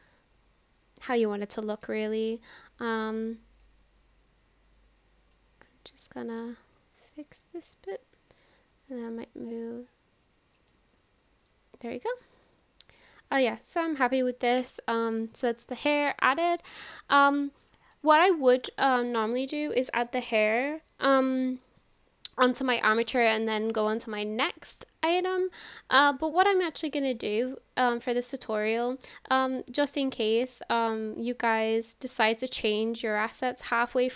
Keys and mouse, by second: 0.9-2.0 drag, 3.7-5.3 drag, 6.2 click, 6.9-8.1 drag, 8.7-10.6 drag, 11.1 ctrl+z, 11.9 middle click, 13.6-14.3 drag, 14.6-15.2 middle drag, 15.3 click, 15.8-16.4 middle drag, 16.4-18.0 drag, 26.7-27.2 shift+drag, 27.5 drag, 27.6-28.5 middle drag, 28.7 shift+middle click, 29.2-32.3 middle drag, 32.7 shift+middle click, 33.2 middle click.